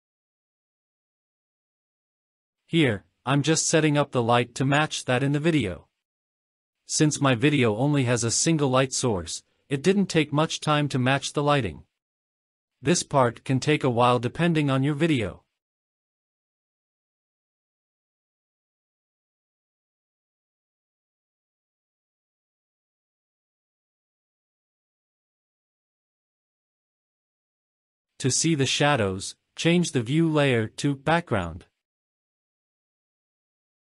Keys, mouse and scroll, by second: 0.0 ctrl+s, 2.3 click, 3.5 click, 4.4 scroll down 1, 4.8-5.2 middle drag, 5.5 scroll down 1, 6.2-6.9 scroll down 3, 7.4 click, 8.1-8.5 scroll up 3, 8.7-9.1 shift+middle drag, 10.6-11.9 drag, 12.5-13.7 scroll down 2, 14.8 KP_0, 16.5 click, 17.9-19.2 scroll down 4, 19.2-19.6 scroll down 2, 19.8 click, 20.6 scroll down 3, 21.6 click, 26.9-28.7 drag, 32.6-33.7 drag.